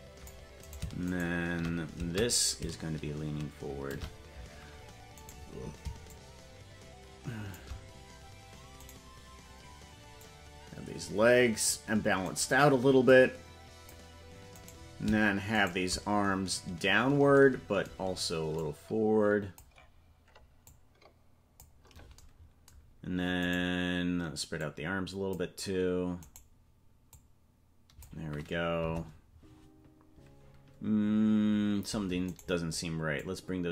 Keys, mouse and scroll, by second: 0.6 right click, 1.1 shift+right click, 2.4-3.9 shift+drag, 5.2 right click, 6.0-7.5 shift+drag, 8.8-10.1 right drag, 10.2-11.7 drag, 12.3 right click, 13.0 click, 14.6 right click, 15.6 shift+right click, 18.5-19.6 drag, 20.6 click, 23.4-24.5 right drag, 24.5 click, 26.2 right click, 27.0 click, 28.7 KP_0, 32.4 right click, 33.1-33.7 drag.